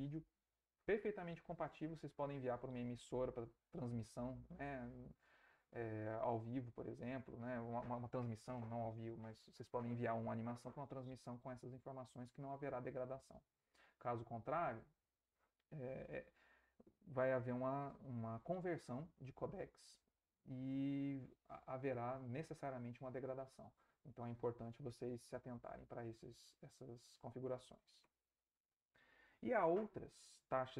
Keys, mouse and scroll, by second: 28.0 Right.